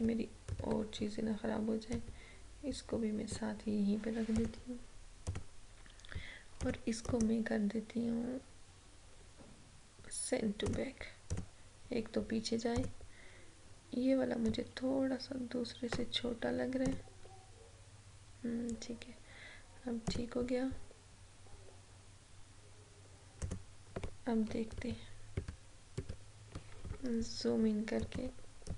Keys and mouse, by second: 1.9-4.4 drag, 7.1 right click, 10.7-16.9 drag, 20.1 click, 23.4 click, 24.8 ctrl+=, 28.1-28.7 drag.